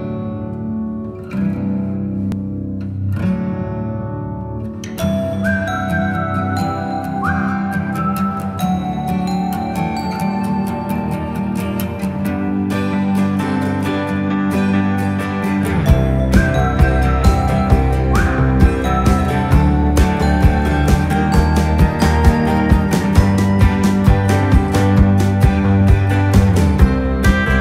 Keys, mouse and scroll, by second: 5.5 click, 5.5 typing, 7.3 click, 7.3-7.8 typing, 9.6 click, 9.6 typing, 11.5-12.5 typing, 12.5 click, 14.3 click, 14.3-16.1 typing, 15.4 click, 16.1 click, 19.0 click, 19.0 typing, 21.4-22.7 typing, 23.6 ctrl+a, 25.0 click, 25.0 typing.